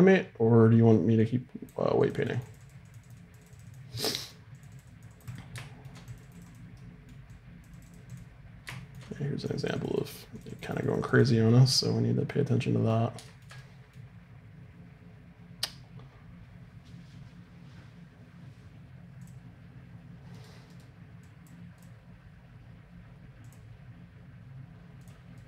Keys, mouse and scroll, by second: 4.0-6.1 middle drag, 11.5-16.0 middle drag, 19.2-21.3 drag, 20.4 right click, 22.4-25.4 drag.